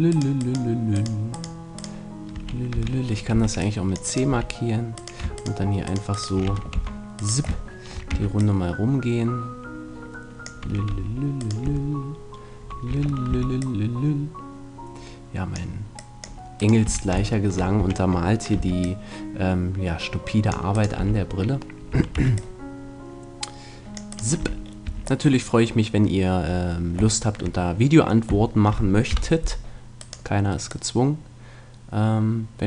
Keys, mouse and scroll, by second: 2.7 v, 3.3 c, 4.1-5.9 right drag, 4.3 f, 6.7 c, 8.1 c, 8.9-10.6 middle drag, 11.6-13.3 right drag, 11.6 f, 12.9 a, 13.3-14.7 middle drag, 13.3 c, 16.7 right click, 16.9 f, 17.3 middle click, 17.7 right click, 17.8 a, 18.5 c, 20.8-22.5 right drag, 20.9 f, 21.9 a, 22.1 c, 24.1 right click, 24.4 f, 24.9 a, 25.9 right click, 29.1 KP_1, 30.0-32.6 middle drag.